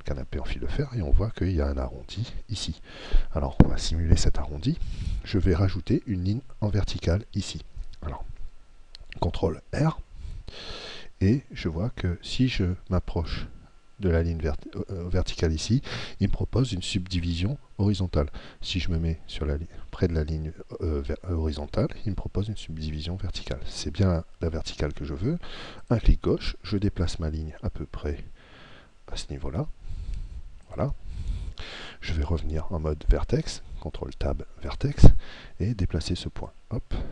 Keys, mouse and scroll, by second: 9.8 ctrl+r, 30.8 click, 33.8 ctrl+Tab, 35.6 right click, 36.4 click.